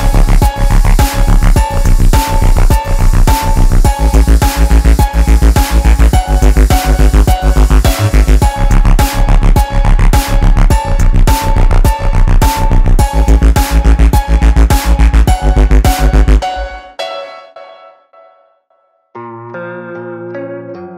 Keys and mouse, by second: 0.2 shift+click, 2.3 shift+click, 2.3-7.2 alt+drag, 8.1 shift+click, 10.3 shift+click, 11.1-16.4 alt+drag, 16.7 ctrl+space, 16.8 ctrl+click, 16.9 ctrl+space, 17.6-19.6 drag, 20.4 ctrl+space, 20.6 ctrl+alt+click.